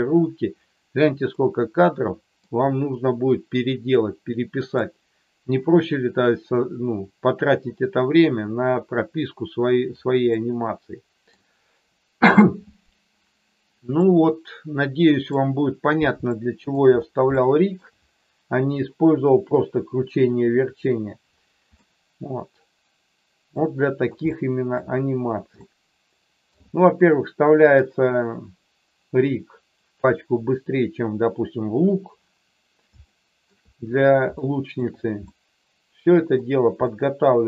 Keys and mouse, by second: 1.5 middle click, 3.9 middle click, 10.3 middle click, 13.9-15.2 middle drag, 16.3 shift+middle click, 17.3 shift+middle click, 21.8-23.6 middle drag, 24.3 shift+middle click, 25.6 shift+middle click, 33.0 shift+middle click, 34.4 shift+middle click, 35.2-36.3 middle drag, 36.9-37.4 middle drag.